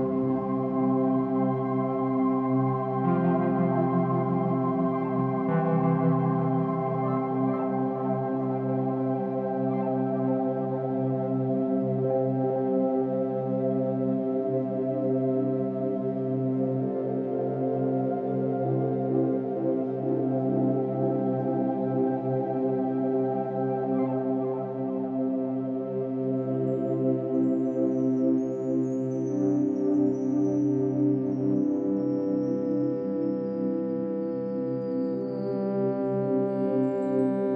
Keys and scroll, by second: 28.6 BackSpace.